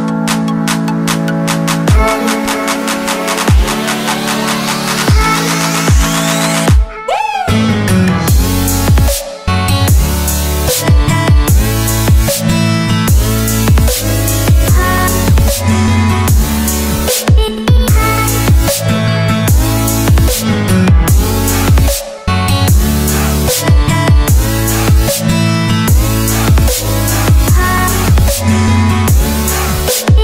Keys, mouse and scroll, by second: 0.0 click, 20.0 ctrl+Num_Lock, 20.5 click, 21.7 Return, 23.1 click, 25.6-26.9 scroll down 1, 26.9 click.